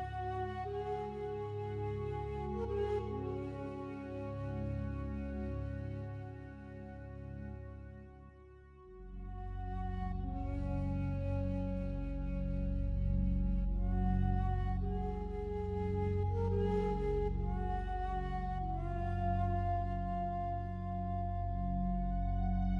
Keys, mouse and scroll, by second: 1.7-5.1 alt+drag, 5.1 a, 5.3 a, 6.9 alt+shift+right click, 11.2 e, 14.6 z, 20.0 click, 20.5-22.7 alt+drag.